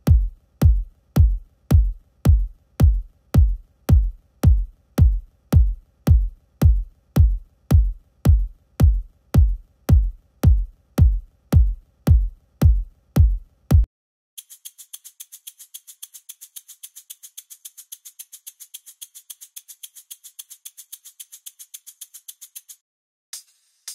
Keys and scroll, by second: 22.7 typing.